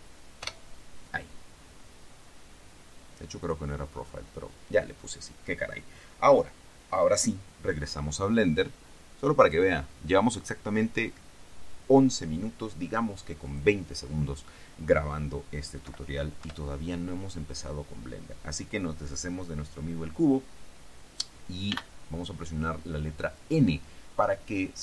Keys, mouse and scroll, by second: 0.6 Return, 3.6 click, 9.6 click, 9.8 middle click, 13.6 click, 16.0 Delete, 16.6 Return, 21.8 n.